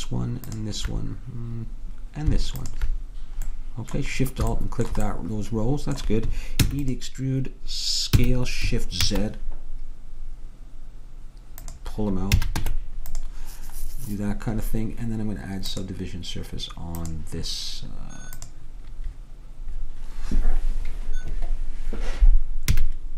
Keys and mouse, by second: 2.7-4.3 drag, 4.3 middle click, 6.7 e, 8.3 s, 12.5 a, 12.7 Tab, 16.0-17.7 drag, 18.5-20.3 drag, 22.9 a.